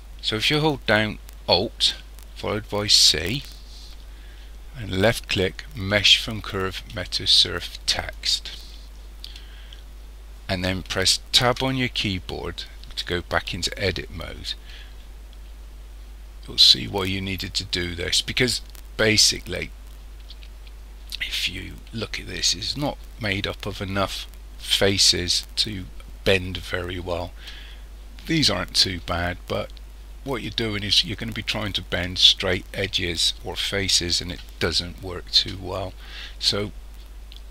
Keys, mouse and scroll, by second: 2.8 alt+c, 11.5 Tab, 19.6-21.3 scroll up 5, 21.3-24.0 scroll up 1, 36.6-37.5 scroll down 6.